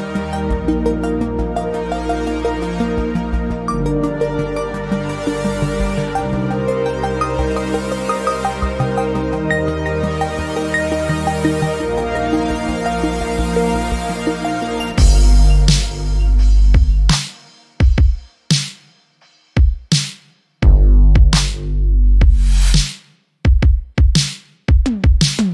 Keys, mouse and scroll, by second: 0.0 shift+a, 1.7 s, 5.6-7.8 drag, 7.8 Tab, 8.5 click, 9.2 ctrl+r, 18.7 click, 18.9 scroll up 2, 19.3 shift+middle click, 20.0 ctrl+r.